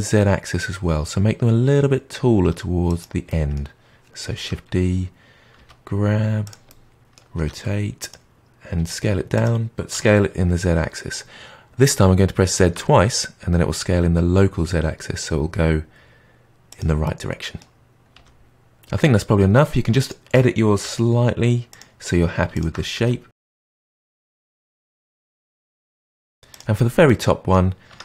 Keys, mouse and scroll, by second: 3.2-4.3 middle drag, 4.3 shift+d, 6.6 middle click, 7.3 r, 8.7 s, 9.9 s, 17.0-18.1 middle drag, 18.1 g, 20.0 shift+click, 20.8 g, 22.5 shift+click, 22.9 g, 23.4 r, 23.7 g, 24.1 middle drag, 24.2 click, 24.5 g, 25.0 click, 25.2 drag, 25.6-26.1 middle drag, 26.1 s, 26.4 click, 27.0-27.8 middle drag, 27.8 Tab.